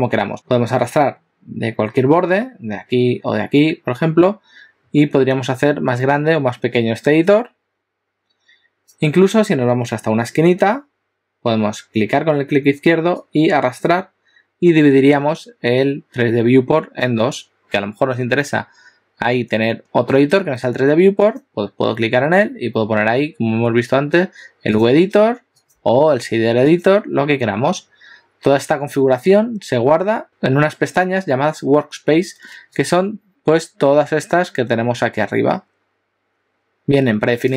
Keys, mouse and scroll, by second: 4.0 click, 5.9 click, 15.8 click, 21.2 click, 25.7 click.